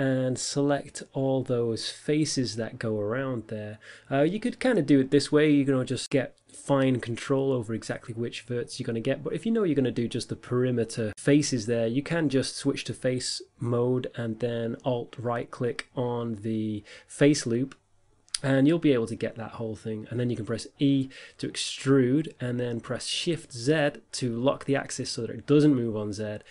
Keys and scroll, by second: 22.7 t, 25.7 s.